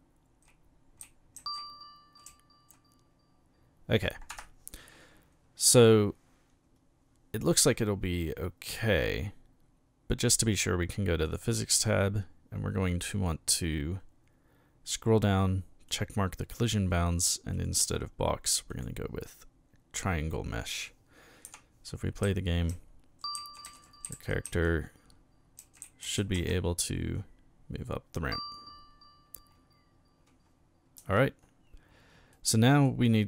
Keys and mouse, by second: 1.0 w, 1.4 a, 2.3 s, 4.3 Escape, 11.2 click, 15.9 click, 18.7 click, 21.4-26.9 typing, 31.0 Escape, 32.3-32.8 middle drag.